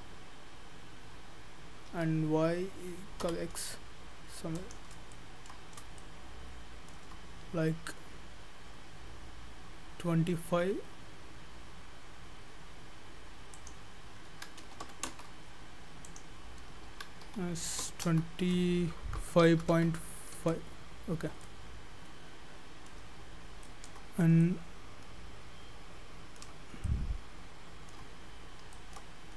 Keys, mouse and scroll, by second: 5.2 shift+middle click, 5.7-6.0 scroll up 3, 6.0 shift+middle click, 13.6 click, 16.1 click, 21.4 shift+middle click, 24.2 scroll up 1, 24.4 shift+middle click, 26.6 scroll up 1, 26.9 shift+middle click, 28.2-28.8 scroll down 9, 28.8 shift+middle click, 29.2 scroll up 1.